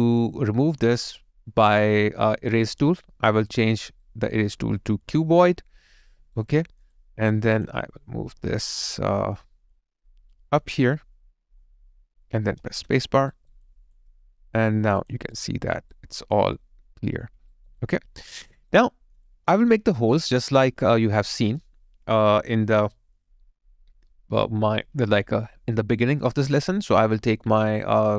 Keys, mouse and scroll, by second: 4.1 alt+right click, 4.6 alt+click, 6.1 alt+right click, 7.0 alt+click, 12.7 space, 13.3 alt+right click, 13.7 alt+click, 15.0 alt+double click, 16.2 alt+middle click, 17.5 alt+right click, 17.8 alt+click, 18.9 alt+middle click, 19.3 alt+click, 25.2 alt+right click, 26.2 alt+click.